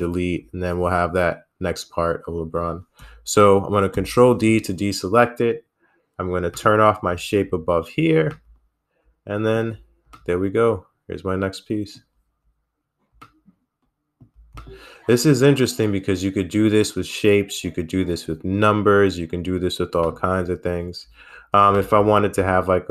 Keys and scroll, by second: 2.1 ctrl+i.